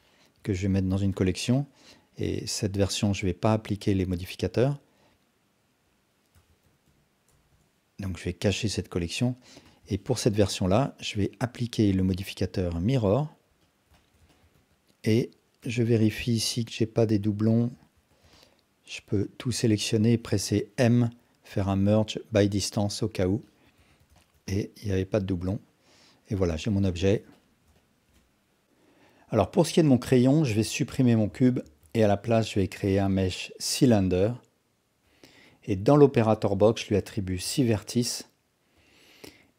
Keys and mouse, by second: 0.1 ctrl+alt+drag, 1.1 m, 7.5 Return, 9.6 click, 9.9 ctrl+alt+drag, 10.3-10.6 alt+shift+drag, 10.7 alt+drag, 12.1-13.1 drag, 13.6 alt+drag, 13.9 alt+shift+drag, 14.3 ctrl+alt+drag, 14.5 Tab, 15.6 1, 16.6-17.4 drag, 17.6 ctrl+z, 18.0 a, 18.3-20.1 alt+drag, 20.8 m, 23.4-23.7 alt+drag, 23.8 Tab, 24.2 alt+shift+drag, 24.5-26.7 alt+drag, 26.9 alt+shift+drag, 27.3 ctrl+alt+drag, 27.7 alt+shift+click, 30.5 x, 31.6 shift+a, 35.7 click, 36.6-38.8 drag.